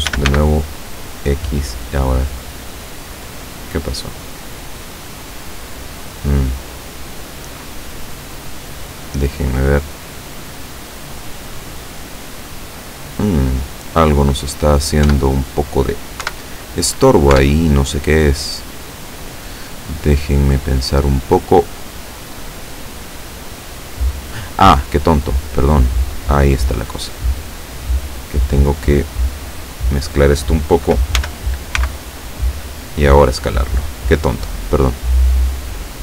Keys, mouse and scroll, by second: 0.1 s, 0.3 x, 8.9 click, 10.4 click, 12.0 middle click, 12.9-13.2 scroll down 2, 13.3-14.4 middle drag, 14.5-14.8 scroll up 2, 15.1 Tab, 16.3 KP_7, 17.4 Tab, 17.9-18.3 scroll up 1, 18.7 scroll up 1, 19.1 scroll down 1, 25.3-30.3 drag, 31.3 s, 31.9 x.